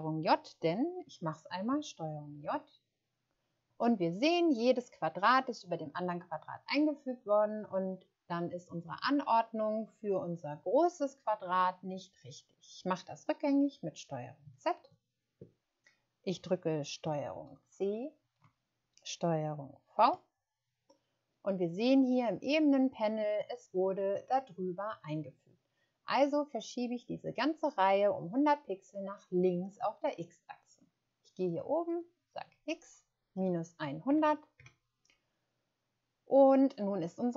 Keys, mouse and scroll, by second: 2.3 ctrl+j, 14.7 ctrl+z, 17.4 ctrl+c, 20.0 ctrl+v, 31.8 click, 33.8-34.2 typing, 34.5 Return.